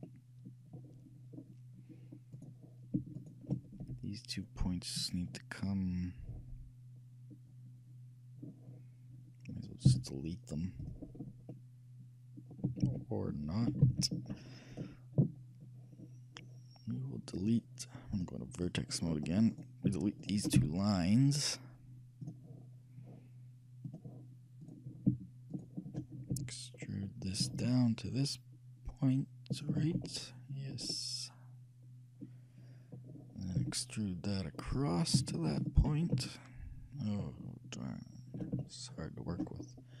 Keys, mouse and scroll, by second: 0.1 shift+click, 0.1-3.9 shift+middle drag, 2.4-5.2 right drag, 3.9 shift+g, 10.0 x, 11.2-13.1 middle drag, 12.9 ctrl+z, 13.9 ctrl+z, 17.4-20.0 drag, 19.2-21.9 middle drag, 19.6-22.2 right drag, 20.7 shift+x, 24.0-25.8 drag, 24.7-27.7 right drag, 26.4 e, 30.2-32.6 shift+middle drag, 33.7 e, 36.2-38.1 middle drag, 38.9-40.0 shift+middle drag.